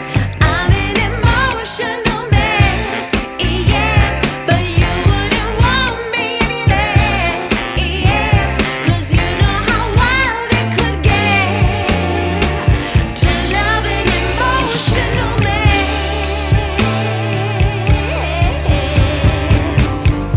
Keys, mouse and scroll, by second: 3.6 click, 5.0 shift+d, 7.7 click, 9.9 click, 10.9 scroll up 1, 11.0 scroll down 1, 13.4 click, 16.1 click, 18.5 click.